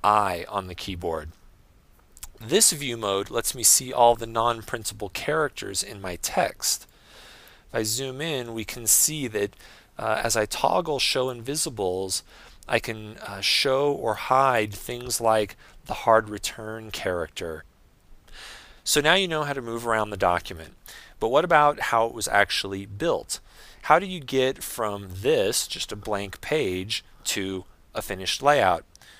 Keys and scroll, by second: 2.1 super+i, 11.3 super+i.